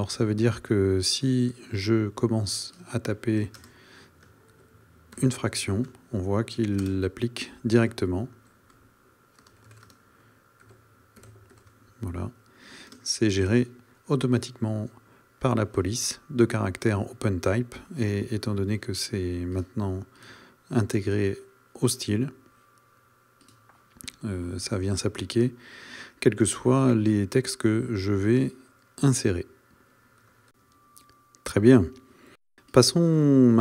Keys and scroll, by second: 3.7 space, 6.8 space, 9.4 space, 13.0 space.